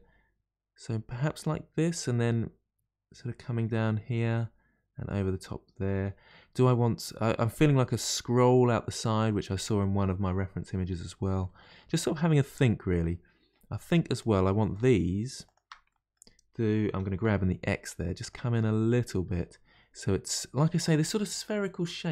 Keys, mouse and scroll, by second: 1.7-4.7 middle drag, 11.4-14.1 middle drag, 14.1 click, 14.7 shift+click, 15.4 shift+click, 15.9-16.9 middle drag, 16.9 g, 18.5-21.6 middle drag.